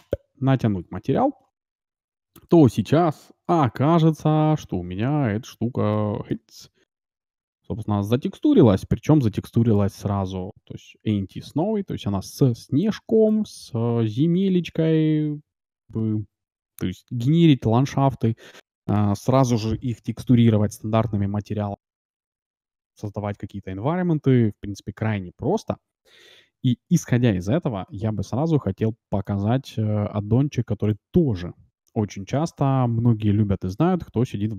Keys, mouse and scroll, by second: 0.0-1.6 drag, 1.4-4.6 middle drag, 3.5 shift+z, 5.4-8.5 middle drag, 8.9-11.0 middle drag, 11.5-12.6 scroll up 1, 12.6 scroll up 1, 12.8-16.8 middle drag, 27.9 shift+z, 28.6-31.0 middle drag, 31.0-32.7 drag.